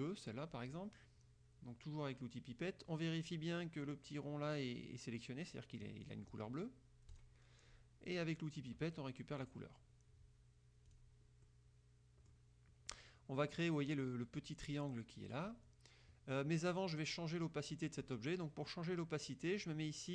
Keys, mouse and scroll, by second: 6.1 click, 7.2 click, 9.5 click, 11.0 click, 11.5-12.6 drag.